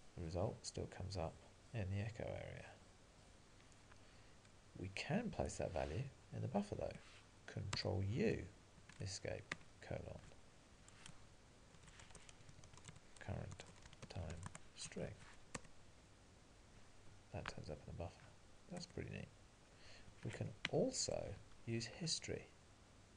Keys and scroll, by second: 14.5 Tab, 15.6 Return, 21.4 alt+:, 21.4 Up.